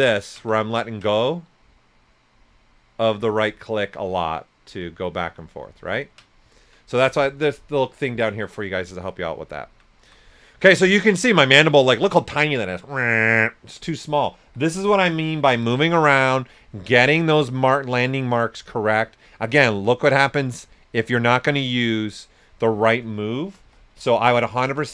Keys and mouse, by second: 0.0 ctrl+right click, 0.6 ctrl+right click, 1.2 ctrl+right click, 10.0 s, 10.3 click, 10.6 right click, 14.2-16.0 typing, 15.5 click, 17.4 s, 17.5 click, 19.4-23.6 right drag, 23.3-24.4 typing.